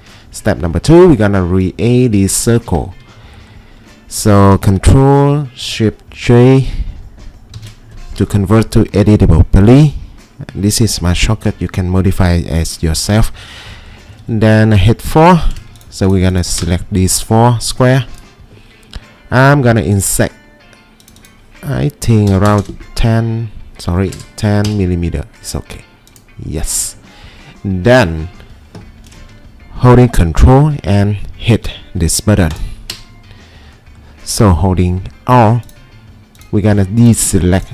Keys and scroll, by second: 1.2 ctrl+2, 2.7 Escape, 7.6 ctrl+shift+g, 14.1 4, 22.1-23.0 typing, 22.6-24.0 scroll up 10, 24.1 typing, 24.7 Return.